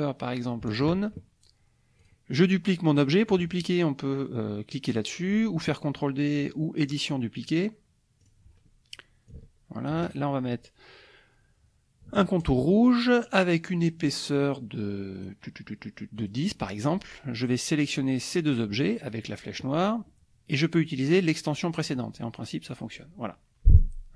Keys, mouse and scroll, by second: 0.7 shift+click, 2.0 click, 6.8 click, 8.2 click, 9.3 ctrl+click, 12.4 shift+click, 13.8 right click, 15.1 right click, 16.2 click, 16.6 click, 17.8-19.3 drag, 20.6 click, 21.8 click, 23.7 click.